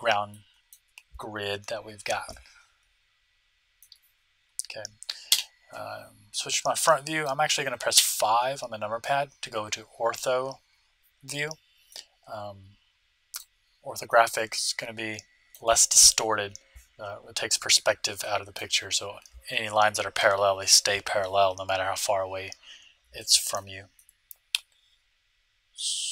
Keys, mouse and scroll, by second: 0.3-2.0 middle drag, 2.2-4.0 middle drag, 5.3 KP_1, 6.8-8.7 middle drag, 7.9 KP_5, 11.8-13.8 middle drag, 14.0-16.2 middle drag, 18.2-20.1 middle drag, 23.1-25.8 middle drag.